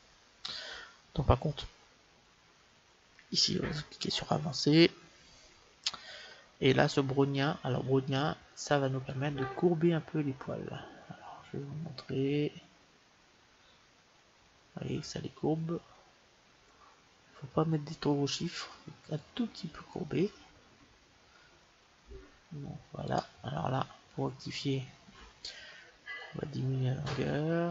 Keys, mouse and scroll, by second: 3.5-5.2 drag, 4.9-9.0 middle drag, 9.0-10.9 drag, 23.9-27.3 middle drag, 26.1-27.7 drag.